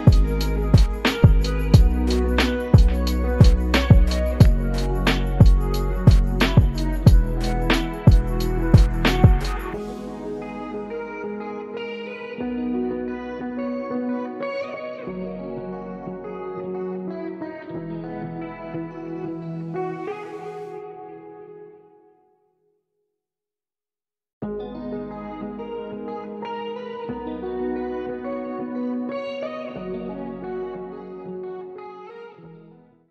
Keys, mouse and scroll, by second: 0.3 click, 0.9 g, 4.8 click, 5.7 g, 7.7 click, 8.1 g, 11.5 click, 12.0 click, 14.8 right click, 16.7 click, 17.3 g, 20.5 shift+middle click, 21.0 click, 21.9 e, 23.5 e, 26.1 e.